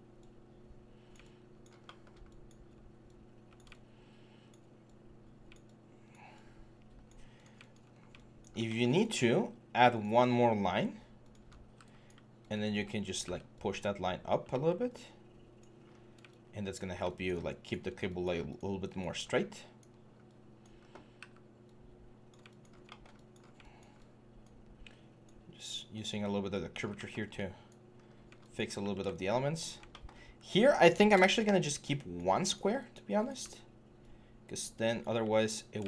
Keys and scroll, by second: 7.7 1, 11.4 w, 13.0 typing, 14.3 typing, 15.7 3, 19.0 1, 20.6-21.0 typing, 27.7 6, 28.6 6, 30.9 BackSpace, 33.2 w, 33.9 w.